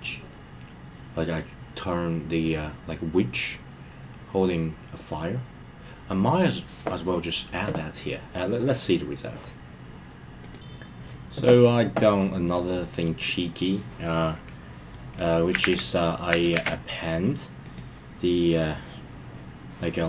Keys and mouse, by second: 13.0-13.3 drag, 17.7-18.6 drag.